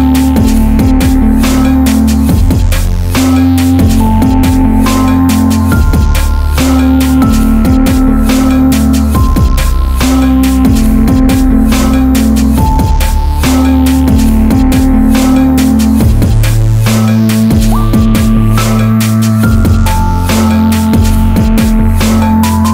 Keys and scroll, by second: 17.0-19.9 typing, 21.3 ctrl+t.